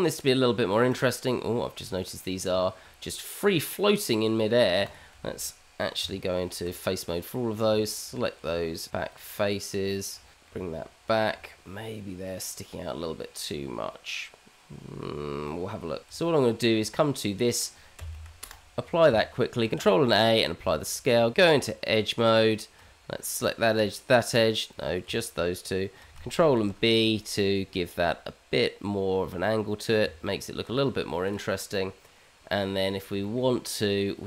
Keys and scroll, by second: 6.3 Tab, 8.6 Tab, 10.3 g, 11.1 Tab, 16.1 Tab, 17.9 q, 18.2 q, 19.7 ctrl+a, 21.3 Tab, 23.7 Tab, 26.6 ctrl+b, 30.0 Tab.